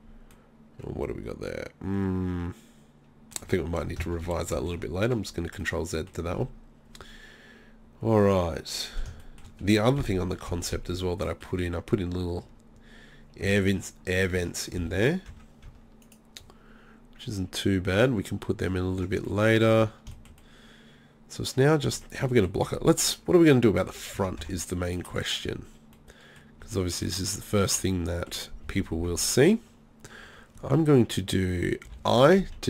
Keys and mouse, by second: 0.0-2.4 middle drag, 3.5 Tab, 4.2 ctrl+z, 4.6 ctrl+z, 10.0 KP_3, 10.5 z, 13.5 z, 14.4 Tab, 14.8 z, 15.3 Tab, 15.7 Tab, 19.0 Tab, 19.8 z, 23.9 z, 24.2 z, 24.4 Tab, 25.1 Tab, 31.9 i.